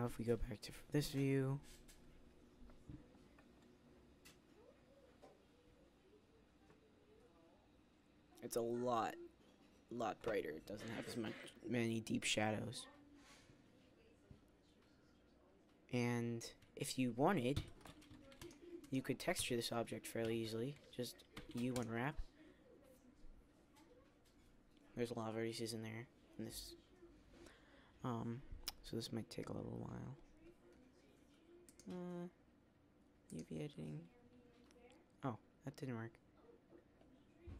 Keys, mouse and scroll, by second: 0.0 KP_0, 18.1 z.